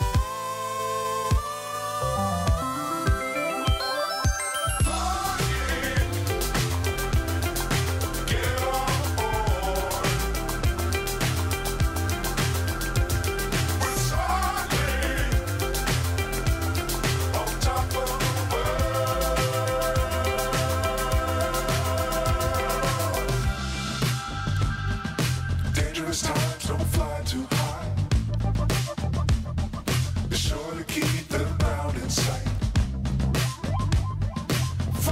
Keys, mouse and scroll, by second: 0.7 shift+click, 1.1 shift+click, 1.4 shift+click, 2.6 click, 4.9 shift+click, 5.6 shift+click, 6.2 shift+click, 6.9 shift+click, 8.2-11.5 drag, 12.0 click, 16.3 click, 18.6 click, 20.3 click, 27.2 ctrl+b, 32.0 click, 33.4-35.1 drag.